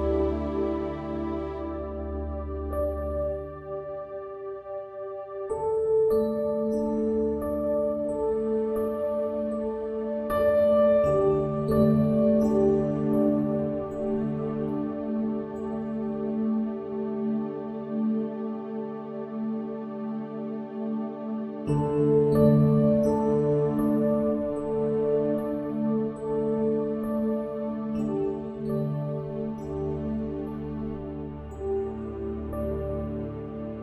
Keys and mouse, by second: 17.8 click, 20.7 click, 23.0 click, 25.5 click.